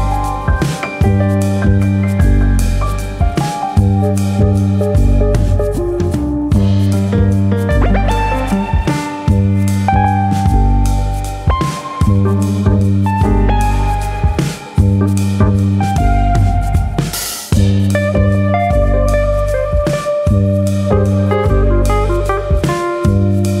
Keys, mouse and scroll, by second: 0.6 alt+click, 1.4 g, 3.0 click, 3.5 click, 3.7 g, 4.8 click, 5.4 click, 6.2 middle click, 7.3 middle click, 8.0 click, 9.1 click, 9.4 shift+click, 9.7 shift+click, 10.2 g, 11.6 click, 11.9 click, 12.4 shift+click, 12.7 shift+click, 15.3 g, 16.3 click, 16.9 middle click, 17.8 click, 18.2 middle click, 18.8 click, 19.7 click, 20.1 shift+click, 20.3 shift+click, 20.8 click, 22.8-23.6 scroll down 2, 23.0 middle click.